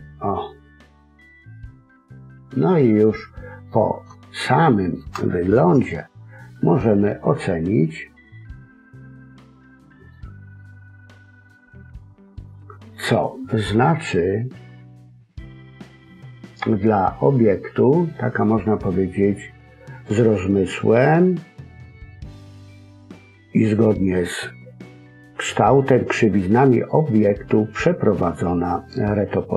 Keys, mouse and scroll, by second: 0.2-0.9 scroll down 1, 0.9 middle click, 0.9-2.2 scroll down 1, 4.1 shift+middle click, 5.7 a, 6.4-7.1 scroll up 2, 7.2-7.7 scroll down 3, 7.5 scroll up 1, 7.7 middle click, 10.5 middle click, 11.8-13.5 scroll up 1.